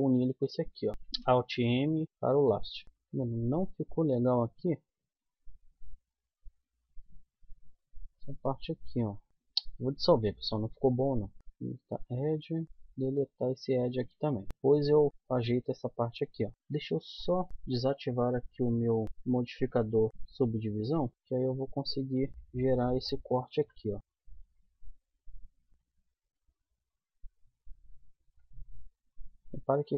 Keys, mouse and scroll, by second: 1.2 alt+m, 4.6 click, 5.3-7.1 middle drag, 10.0 x, 11.4 middle click, 12.5 middle click, 12.6 click, 12.6 x, 12.9 middle click, 15.9 middle click, 16.4 middle click, 17.5-20.3 drag, 22.1 click, 23.4 k, 28.7 middle click.